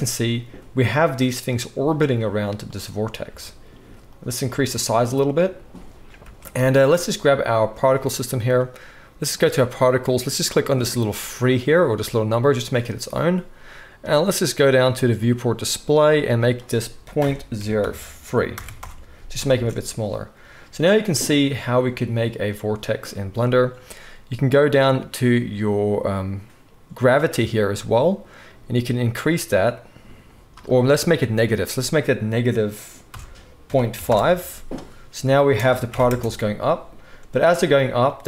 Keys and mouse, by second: 2.6 click, 3.2 s, 6.2 space, 6.5 click, 6.8-9.3 middle drag, 9.3 click, 9.5-10.7 middle drag, 10.7-38.2 drag, 19.5 space, 35.4 space, 35.9 shift+Left, 36.0 space.